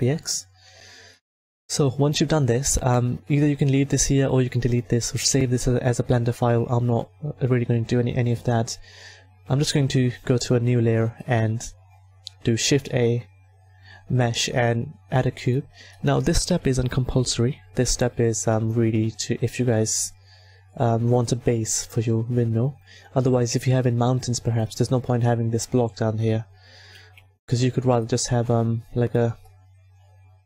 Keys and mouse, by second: 10.3-12.6 drag, 12.6 shift+a, 17.1 KP_1, 18.3 s, 22.7-24.5 drag, 26.9 s, 28.3-30.3 drag.